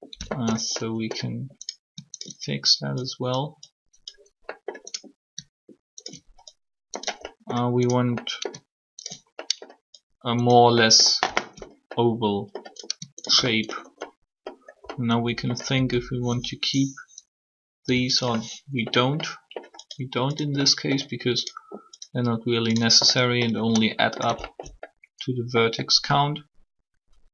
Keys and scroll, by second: 15.7 s, 17.8 0.